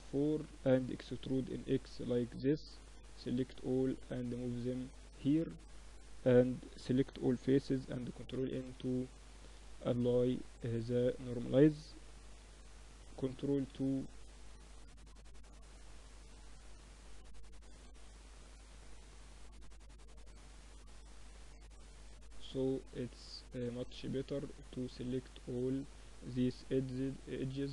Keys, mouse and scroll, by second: 0.1 e, 1.3 Tab, 2.0-3.4 drag, 3.2 z, 3.5 click, 3.8 middle click, 4.7 Tab, 5.0 Tab, 5.6 Tab, 5.7 a, 5.9 a, 6.5 ctrl+n, 6.7 Tab, 8.4-9.6 middle drag, 9.0 Tab, 9.4 Tab, 11.4 Tab, 11.8 Tab, 12.3 ctrl+2, 12.8 Tab, 13.6 ctrl+r, 16.8 ctrl+r, 18.6 Tab, 18.8 middle click, 19.1 Tab, 21.6 click, 22.5 middle click, 22.7-25.4 drag, 22.7 right click, 25.5 shift+e, 27.2-27.7 middle drag.